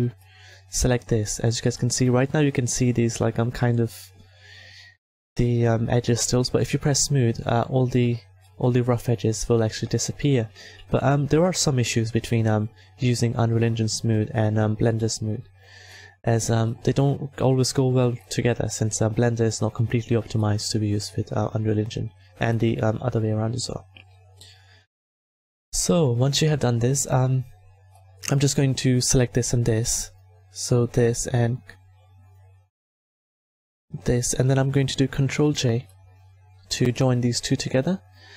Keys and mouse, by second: 6.5-8.4 drag, 8.4-11.0 middle drag, 11.9 s, 12.2 a, 24.3-30.0 middle drag, 30.0-31.2 drag, 31.2-33.8 right drag, 35.2 ctrl+j, 36.2 a.